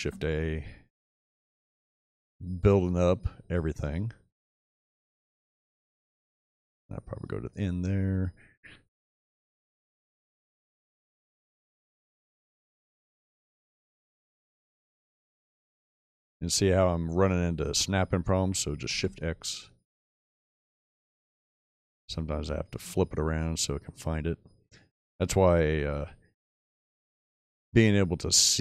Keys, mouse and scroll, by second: 0.0 shift+a, 9.3 shift+a, 18.7 shift+x, 25.4 click, 27.2-27.9 middle drag.